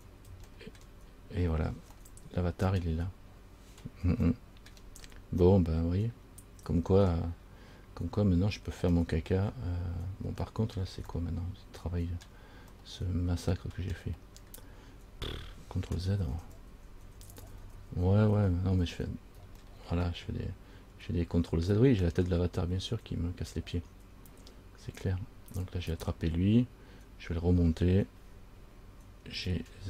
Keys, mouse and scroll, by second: 0.7 shift+middle click, 2.2 middle click, 4.6 shift+middle click, 5.6 middle click, 8.2 scroll up 2, 9.1 shift+middle click, 10.6 shift+middle click, 11.3 middle click, 13.0 middle click, 14.6-16.0 scroll down 4, 16.0 scroll down 1, 16.5 ctrl+z, 16.7 ctrl+z, 16.9 ctrl+z, 17.3 ctrl+z, 17.5 ctrl+z, 17.8 ctrl+z, 18.0 ctrl+z, 18.6 ctrl+z, 19.1 ctrl+z, 19.8 middle click, 23.9 middle click, 26.1 right click, 29.6 g.